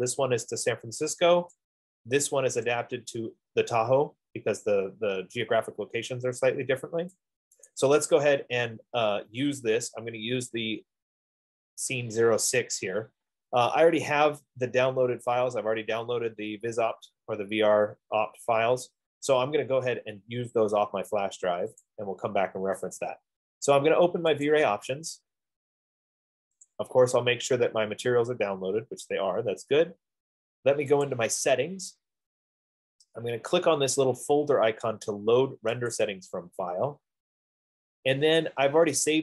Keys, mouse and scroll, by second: 1.7 click, 7.2 click, 7.9 click, 9.8 middle click, 9.9-10.3 scroll up 2, 11.7-12.2 scroll down 2, 15.1 middle click, 15.2 middle click, 17.3 middle click, 18.4 middle click, 22.2 click, 22.5 scroll, 24.4 F15, 24.8 click, 27.1 click, 31.6 click, 36.3 click.